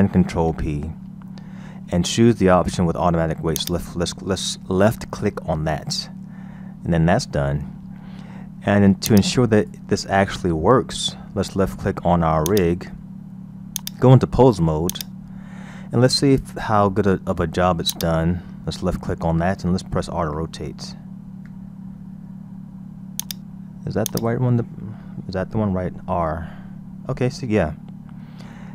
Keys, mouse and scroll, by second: 0.4 ctrl+p, 6.1-6.5 scroll down 2, 6.5-7.7 scroll up 3, 7.7-9.1 scroll down 2, 9.1 click, 10.1-11.6 scroll up 4, 11.6-12.5 scroll down 1, 12.5 click, 13.8-16.8 drag, 17.9 click, 20.3 f, 21.4 r, 24.1 click, 25.5 r.